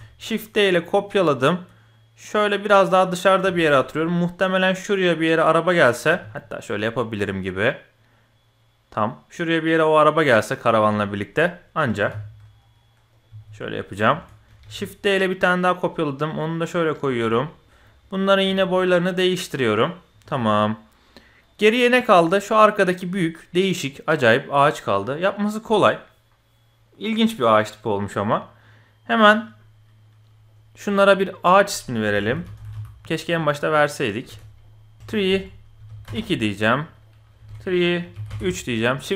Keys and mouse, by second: 3.5 shift+click, 6.1 g, 11.0 shift+click, 11.8 g, 13.3 g, 14.1 shift+click, 14.6 shift+d, 17.2-17.6 drag, 17.8 click, 18.4 s, 21.5-22.1 middle drag, 22.5-22.9 middle drag, 24.0 middle click, 25.2 middle click, 31.4-34.6 drag, 32.7 e, 35.0-36.1 ctrl+drag, 37.0-38.3 ctrl+drag.